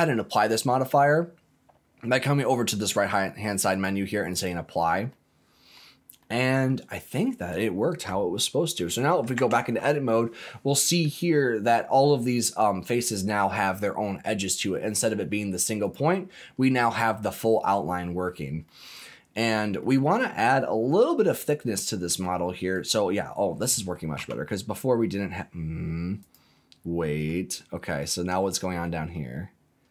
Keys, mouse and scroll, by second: 0.3-1.3 drag, 3.7 click, 5.1 middle click, 6.2 middle click, 7.6-8.1 scroll up 3, 8.4-8.8 scroll down 1, 8.8 middle click, 9.3 Tab, 10.4 middle click, 11.7 click, 13.0 middle click, 15.8 click, 17.3 middle click, 18.3-18.6 scroll down 2, 18.6 middle click, 19.3 scroll up 2, 19.8 middle click, 20.4 middle click, 20.8-21.9 middle drag, 21.9 middle click, 22.7 click, 24.1 g, 26.2 click, 27.1 middle click, 27.8-28.2 scroll up 2, 28.3 shift+middle click, 29.3-29.9 scroll up 2.